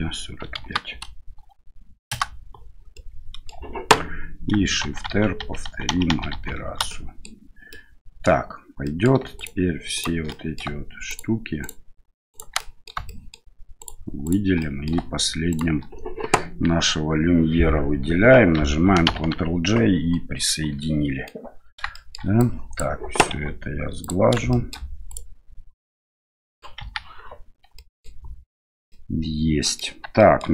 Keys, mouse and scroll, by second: 3.0-3.5 middle drag, 4.8-6.3 typing, 7.0-7.3 middle drag, 7.7-8.3 middle drag, 8.9 middle click, 9.4 shift+right click, 10.0 shift+right click, 10.3 middle drag, 11.1 shift+right click, 11.6 shift+right click, 12.3 shift+right click, 12.6-12.9 middle drag, 13.1 shift+middle drag, 13.8 shift+right click, 14.2 shift+right click, 14.6 middle click, 15.5 shift+right click, 19.2 ctrl+j, 20.8-21.3 middle drag, 21.9 shift+middle drag, 22.4 click, 23.3 q, 24.5 shift+middle drag, 25.1 right click, 25.8-26.6 middle drag, 26.8 KP_1, 27.8 middle drag, 28.9-29.8 middle drag, 30.2 shift+middle drag.